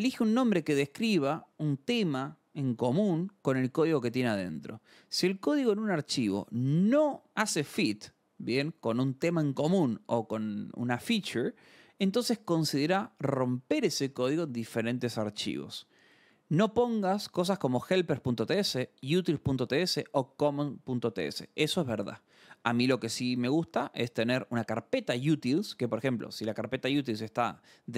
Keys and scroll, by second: 22.4 alt+Tab, 23.4-24.4 scroll up 2, 24.5 scroll up 1, 25.5 Return, 26.7 k, 27.6 j.